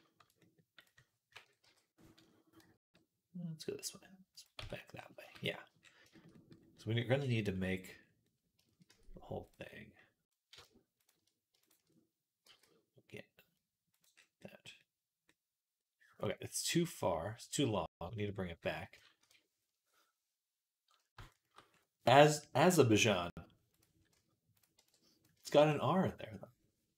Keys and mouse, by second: 0.6 click, 0.6 middle click, 1.4 KP_3, 2.4 g, 4.4 Tab, 5.1 z, 5.9-7.1 shift+middle drag, 8.7 Tab, 9.5-12.1 right drag, 10.8 shift+click, 10.8 shift+middle click, 12.3 g, 14.0-21.0 drag, 19.0 KP_3, 21.6 click, 24.0 z, 24.6 b, 25.3 shift+middle click.